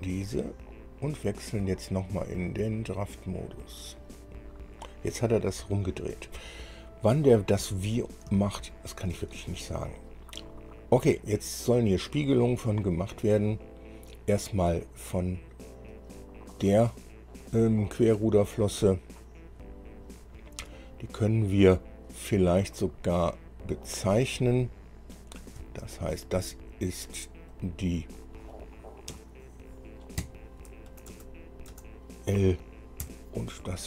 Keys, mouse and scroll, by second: 1.5 click, 3.4 click, 4.5 scroll down 1, 6.4-6.8 scroll up 1, 7.1-7.5 scroll up 1, 8.2 scroll down 2, 8.6 shift+middle click, 9.9 scroll up 2, 16.1 click, 23.6-24.7 middle drag, 25.4 click, 25.8 space, 27.7 click, 29.3 F2, 30.4 Right, 31.1 BackSpace, 31.3 BackSpace, 31.9 BackSpace, 33.2 -.